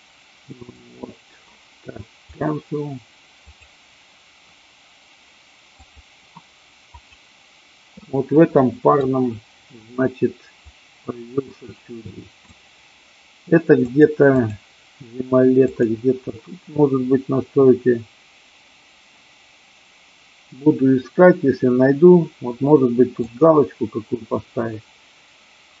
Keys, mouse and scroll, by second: 3.6-7.3 drag, 8.6 middle click, 10.7-12.6 drag, 14.2 click, 15.6-22.9 drag, 23.3-25.8 drag.